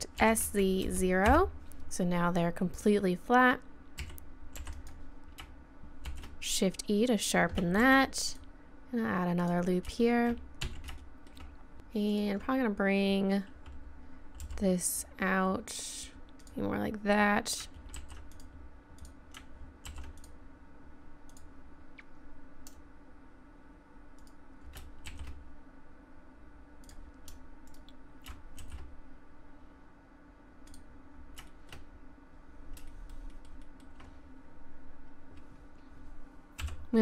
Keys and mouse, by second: 0.2 s, 4.0 a, 4.6 b, 6.1 shift+e, 7.8 ctrl+r, 10.6 z, 12.1-14.4 drag, 14.4 g, 17.9 ctrl+r, 19.9 ctrl+r, 24.2-26.2 right drag, 25.1 shift+e, 27.7-29.7 drag, 28.6 shift+e, 31.5 click, 33.3 middle click, 33.6-36.4 middle drag, 36.6 KP_7.